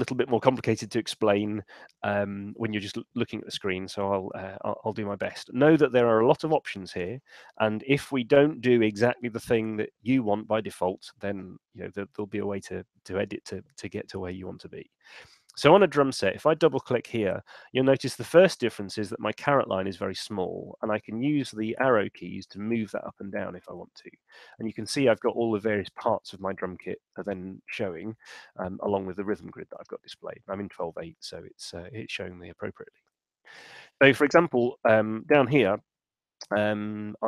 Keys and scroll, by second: 20.5 Up, 21.3 Down, 23.1 Up, 24.3 Down, 24.5 Up, 26.3 Down, 33.2 Down.